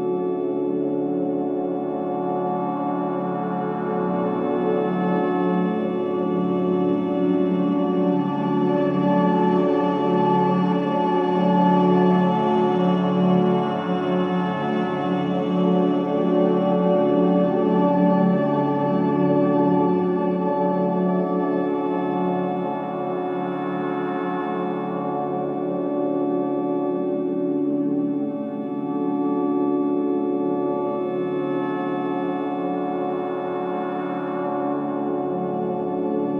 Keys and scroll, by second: 2.5 3, 4.0 ], 10.1 4, 16.3 3, 27.8 4, 29.8 shift+i, 30.5 F3, 31.0 1, 33.8 F3, 35.1 4.